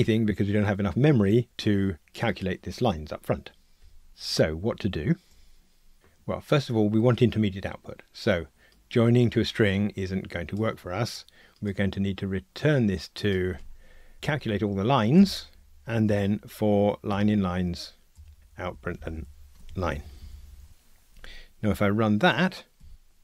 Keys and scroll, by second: 11.5 super+z, 17.1 Tab, 19.0 alt+shift+Up, 19.6 Tab, 22.8 ctrl+r.